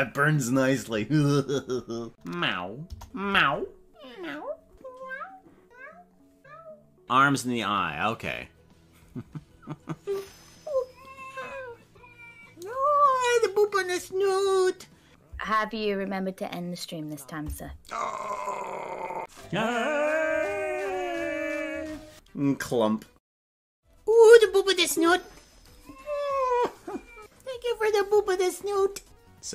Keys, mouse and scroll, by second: 2.2 click, 2.8 KP_0, 3.6 scroll up 7, 29.2 click, 29.2 space.